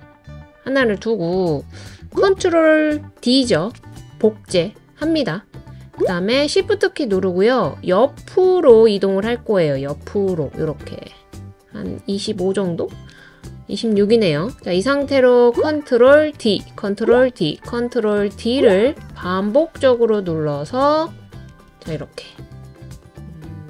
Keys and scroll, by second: 3.6 super+d, 16.3 super+d, 17.0 super+d, 17.6 super+d.